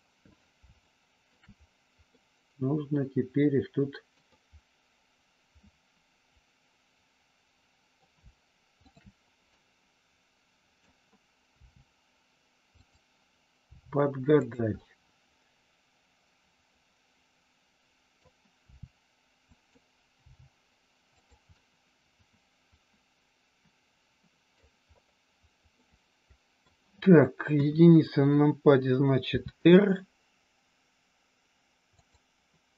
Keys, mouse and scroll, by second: 0.8 shift+middle click, 0.8 scroll up 1, 2.0 scroll up 1, 2.2-4.2 middle drag, 4.4-8.0 middle drag, 8.8 shift+click, 9.5-10.8 middle drag, 11.5 r, 12.6 click, 13.6 g, 14.4 click, 14.8-18.2 middle drag, 18.6 r, 19.4 click, 20.2 g, 21.2 click, 21.5-24.6 middle drag, 25.9 middle click, 27.5 KP_1, 29.3 r, 31.9 click.